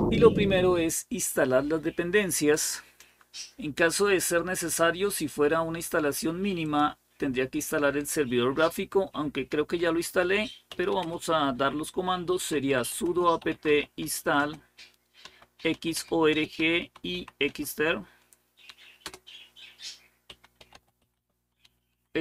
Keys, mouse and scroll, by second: 2.2 click, 4.4-5.7 scroll down 1, 6.4 click, 7.0 click, 9.6-17.8 typing, 18.8-22.2 typing.